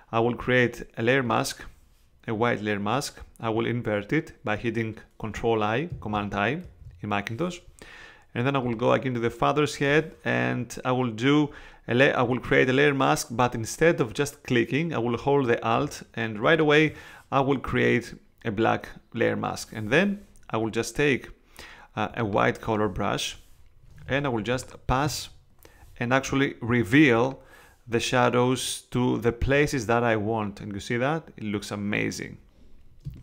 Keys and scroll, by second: 6.6 super+i, 24.0 space, 33.0 space.